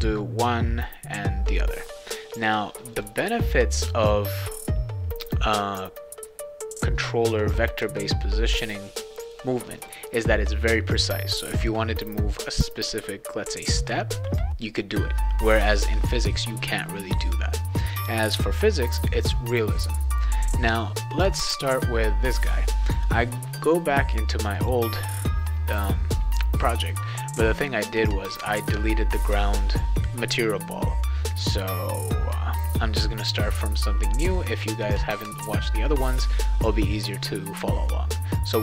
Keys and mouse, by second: 2.9 click, 3.8 click, 9.8 click, 24.6 click, 33.1 right click.